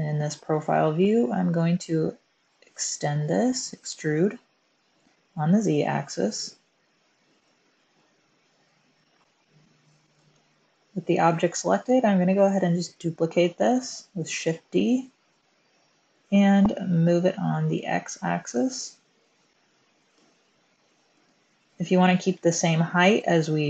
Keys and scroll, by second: 2.7 e, 6.4 z, 7.1 z, 10.0 Tab, 14.4 shift+d, 17.7 x.